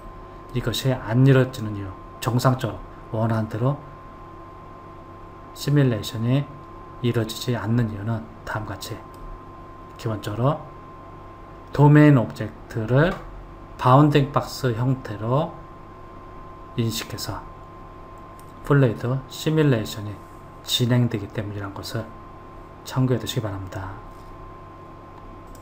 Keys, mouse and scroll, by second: 0.3-3.3 middle drag, 8.8-12.0 middle drag.